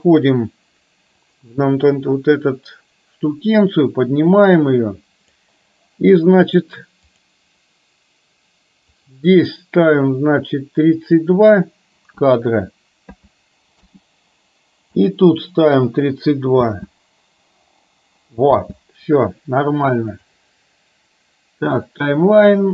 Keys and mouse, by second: 4.5 click, 9.1-14.0 drag, 16.8 space, 18.8 space, 20.2-22.0 drag.